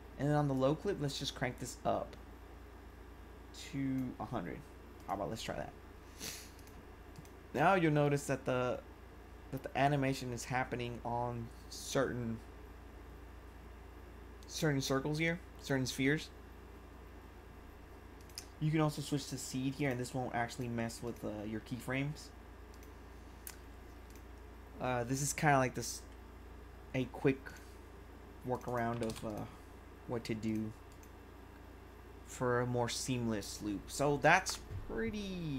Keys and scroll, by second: 28.9 5.